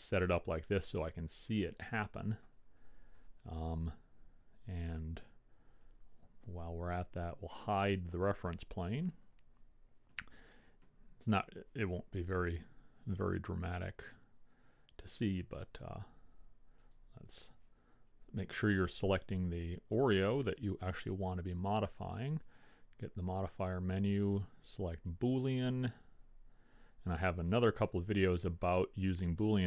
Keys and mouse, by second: 5.9-7.8 drag, 9.1-10.8 drag, 17.1-18.9 drag, 22.7-24.3 drag.